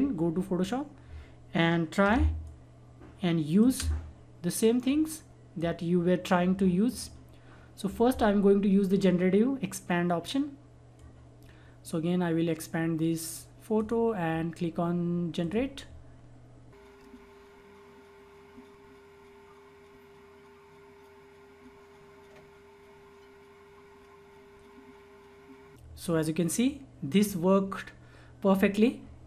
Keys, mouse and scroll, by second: 2.1 space, 2.4 click, 2.5 space, 2.8 click, 3.1 space, 4.8-6.8 drag, 10.9-15.4 drag, 27.2-29.2 drag.